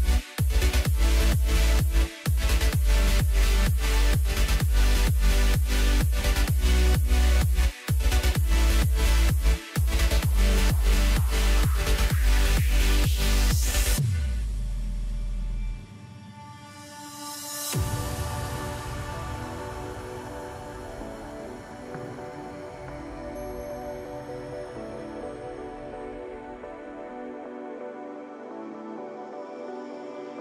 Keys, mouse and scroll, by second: 0.9 click, 2.0-4.9 drag, 14.1-16.7 drag, 19.3 click, 20.2-21.2 scroll down 5, 21.9-22.9 drag, 22.9-24.7 scroll up 3, 25.2 click, 26.4 click, 26.9-27.4 scroll down 2, 27.4-29.9 middle drag, 29.9-30.4 scroll up 2.